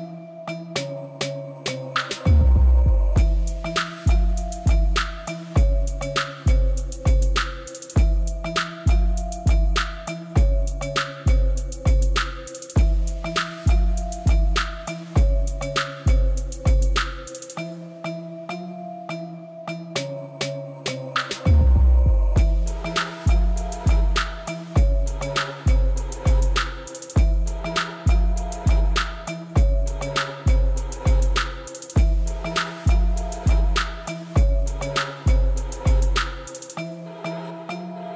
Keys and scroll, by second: 0.6 u, 4.3 u, 5.3 u, 6.0 u, 9.4 u, 10.4 Tab, 14.3 Tab, 16.9 u, 17.9 u, 20.3 u, 20.8 Tab, 22.1 alt+a, 32.2 ., 35.0-36.0 typing, 36.2 Return, 37.4 shift+d, 37.6 y.